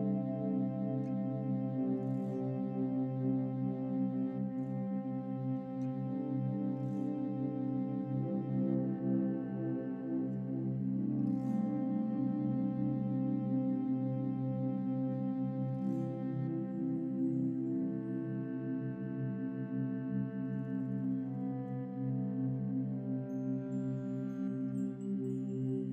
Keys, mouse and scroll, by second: 0.1 Tab, 0.3 scroll up 3, 0.5-1.7 middle drag, 1.6 click, 1.7 click, 2.0 middle click, 2.4 scroll up 3, 2.9 click, 3.3 click, 3.9 click, 4.2 scroll down 3, 4.4 click, 5.0 scroll up 1, 5.2-6.8 middle drag, 7.0 click, 7.5-9.8 middle drag, 9.8 click, 10.2-11.8 middle drag, 11.8 click, 12.0 scroll down 3, 12.3 middle click, 13.0 Tab, 13.3 click, 14.0 Tab, 14.6 click, 14.9-17.3 middle drag, 17.4-17.9 scroll up 6, 17.9 shift+middle click, 18.9-19.3 scroll up 3, 19.3 click, 20.1 middle click, 20.7-21.2 scroll down 1, 21.2 click, 21.7-23.5 middle drag, 23.5 shift+click, 23.9 scroll down 4, 24.2-25.2 middle drag, 25.2 scroll up 3.